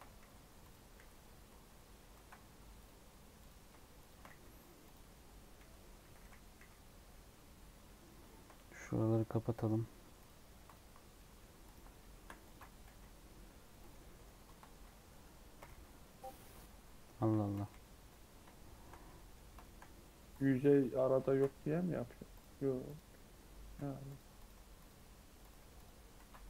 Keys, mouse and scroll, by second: 0.2-1.5 typing, 0.6 click, 2.1 ctrl+z, 2.7-4.3 drag, 4.3 f, 4.8 click, 5.5 f, 6.0 f, 6.2 f, 6.5 f, 6.9 scroll down 2, 7.1 middle click, 7.5 Tab, 7.8-8.8 middle drag, 8.8 Tab, 9.1 middle click, 9.8 2, 10.1 click, 11.1 middle click, 11.6-12.8 drag, 12.8 g, 13.9 middle click, 14.4 scroll down 1, 14.4 shift+middle click, 14.9 scroll up 1, 15.0 middle click, 15.5 g, 17.1 1, 17.5 g, 18.4 shift+middle click, 18.9 scroll up 1, 19.0-20.2 middle drag, 20.2 click, 21.2 shift+Tab, 22.3-23.7 drag, 23.7 g, 24.3 click, 24.5 g, 25.3 click, 25.5 g, 26.1 ctrl+z.